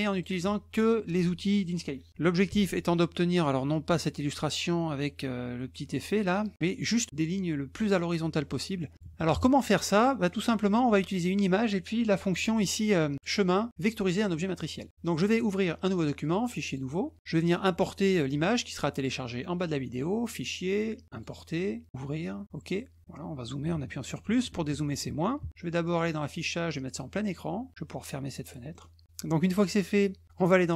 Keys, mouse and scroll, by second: 0.1 alt+click, 2.4 ctrl+1, 3.9 click, 6.3 click, 7.3 middle click, 8.4 middle click, 8.8 middle click, 9.9 middle click, 13.1 click, 14.5 click, 16.2 click, 16.7 click, 20.2 click, 21.1 click, 26.0 click, 26.8 click, 28.2 click, 28.7 middle click.